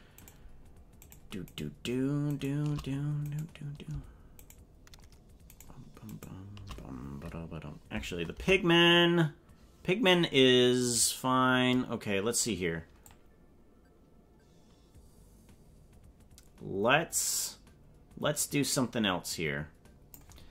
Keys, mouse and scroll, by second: 0.2 shift+right click, 1.1 right click, 1.6 right click, 2.4 shift+right click, 3.4 right click, 4.4 shift+right click, 5.6 shift+right click, 6.2 shift+right click, 8.3 KP_0, 13.1-20.3 drag.